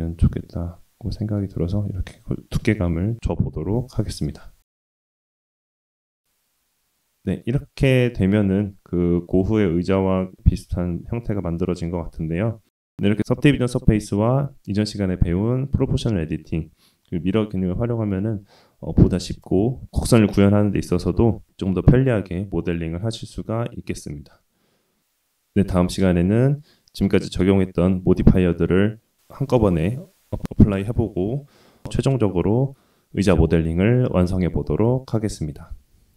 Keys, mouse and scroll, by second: 1.6-1.9 scroll down 1, 1.9-2.7 middle drag, 4.1 shift+middle click, 4.7-5.2 middle drag, 5.3-5.8 scroll down 1, 5.8-7.4 middle drag, 7.6-8.6 scroll down 1, 8.6-9.2 middle drag, 9.4-9.8 shift+middle drag, 12.3 shift+middle click.